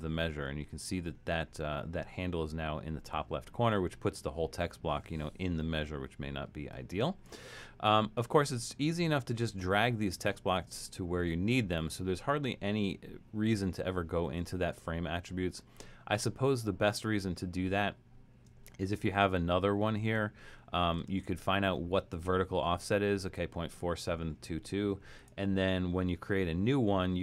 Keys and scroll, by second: 21.1 shift+Return.